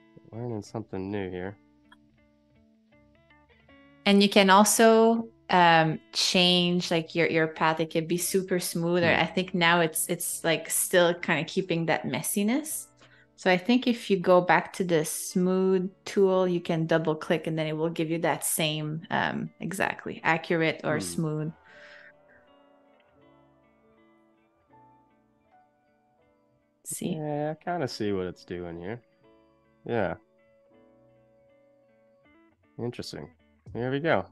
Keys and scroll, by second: 14.3 super+z, 15.4 super+z.